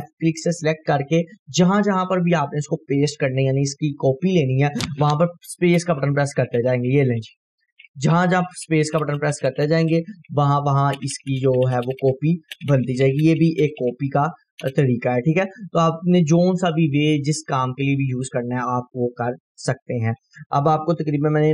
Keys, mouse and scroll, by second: 5.7 space, 15.5-16.0 scroll down 1, 16.3-16.9 drag, 19.2 Delete.